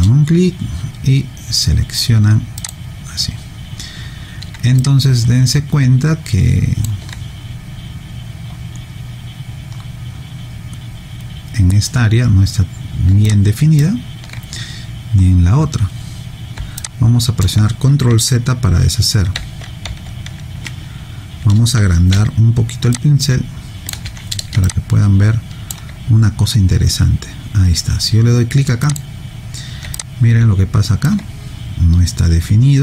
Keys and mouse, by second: 2.7 click, 4.8 alt+click, 13.3 alt+click, 16.8 alt+click, 19.3 ctrl+z, 19.9 ctrl+z, 22.1 b, 22.9 click, 24.6 alt+click, 28.9 click, 29.9 alt+click.